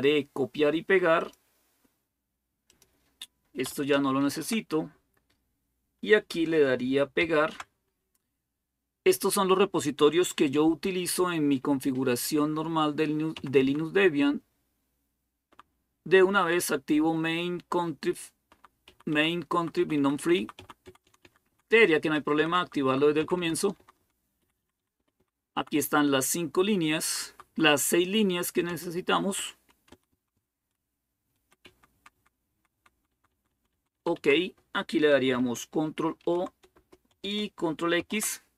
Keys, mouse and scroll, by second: 1.0 click, 2.5 click, 4.0 ctrl+k, 7.0 ctrl+shift+v, 10.6 Up, 11.3-12.3 Up, 13.1 Down, 13.4 Down, 14.2 Right, 14.8-15.3 Right, 15.6 Right, 17.0-18.3 Right, 18.7 Right, 19.4 Right, 19.6 Right, 19.8 Right, 20.0 Right, 20.2 Right, 20.5 Right, 20.6 Down, 20.8 Down, 21.0 Down, 21.3 Down, 21.8 Up, 22.2 Right, 22.6 Right, 23.0 Down, 23.2 Down, 23.4 Down, 23.6 Down, 24.2 Down, 24.2 Up, 24.4 Up, 24.6 Up, 24.8 Up, 25.2 Up, 25.4 Right, 25.5 Right, 26.2-27.1 Right, 27.5 Right, 27.7 Right, 28.5 Down, 29.2 Right, 29.4 Right, 29.7 Left, 29.9 Left, 30.1-31.5 Left, 31.5 Down, 31.7-32.4 typing, 33.3 Down, 33.6 Down, 33.8 Down, 34.0 Down, 36.1 ctrl+o, 36.6 Return, 37.8 ctrl+x.